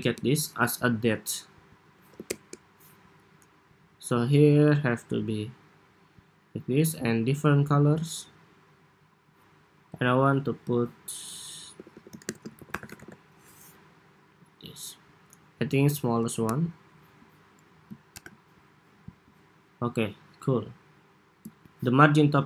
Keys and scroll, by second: 10.4 super+a, 13.4 Escape, 17.8 super+-.